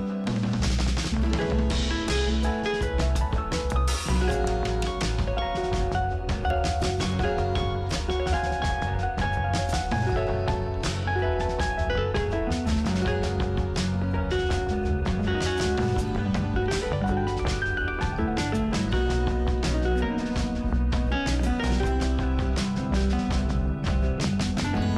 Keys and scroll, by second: 9.8 ctrl+alt+z.